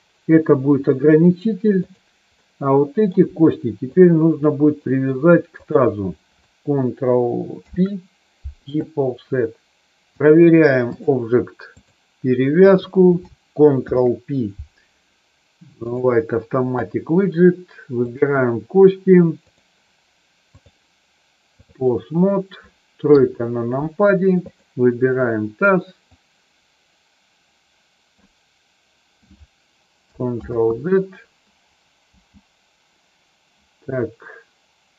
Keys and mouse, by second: 1.9 click, 2.4 middle click, 3.9 shift+click, 4.7 middle click, 5.6 shift+click, 7.6 ctrl+p, 10.1 click, 11.7 click, 13.9 ctrl+p, 19.5 click, 20.5-21.7 drag, 23.1 KP_3, 24.4 click, 26.1-28.2 drag, 30.4 ctrl+z, 32.1 g.